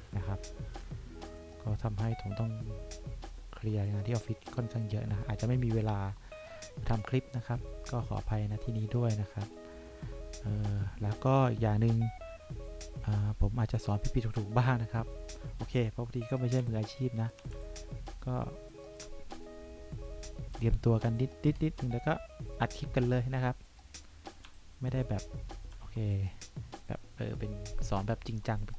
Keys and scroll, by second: 16.8 3, 17.7 1, 24.7 1.